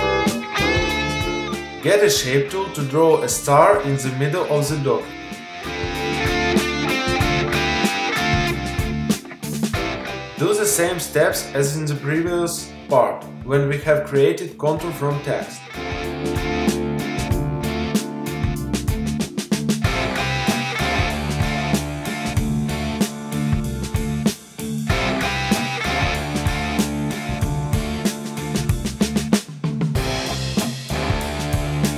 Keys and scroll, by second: 5.3 shift+space.